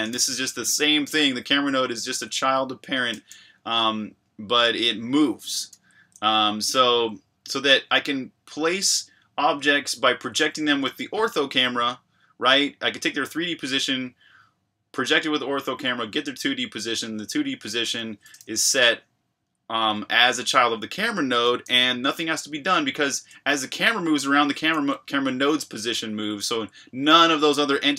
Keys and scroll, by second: 0.1 shift+v, 5.7 Escape, 10.3 j, 18.0 k, 18.4 shift+v, 21.6 Escape.